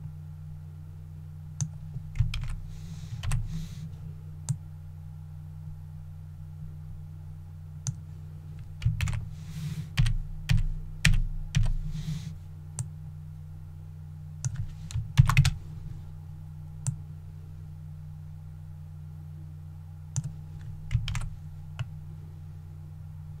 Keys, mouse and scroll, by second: 2.3 alt+a, 3.2 alt+l, 4.5-8.1 drag, 9.0 alt+a, 10.0 alt+l, 10.5 alt+l, 11.1 alt+l, 11.6 alt+l, 12.8-14.9 drag, 15.2 shift+d, 16.9-20.9 drag, 21.1 alt+a, 21.8-23.4 middle drag.